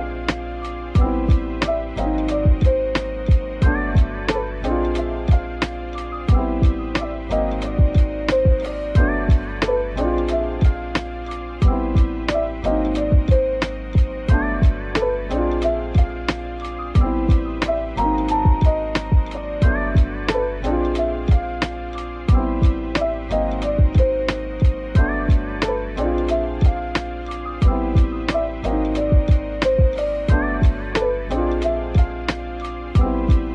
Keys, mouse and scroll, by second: 2.0 typing, 3.3 typing, 7.4 typing, 7.9-8.6 scroll down 1, 8.6 middle click, 9.5 scroll up 1, 9.9 middle click, 11.9 Tab, 12.5-13.4 typing, 15.5 middle click, 16.4-16.9 typing, 18.5-18.9 scroll down 1, 18.9 middle click, 19.8-20.6 scroll up 1, 20.6-21.0 typing, 22.9-23.2 typing, 25.2 double click, 25.5 scroll up 1, 28.2-28.7 scroll down 1, 28.8 shift+right click, 29.4 typing, 31.5 typing, 33.4-33.5 typing.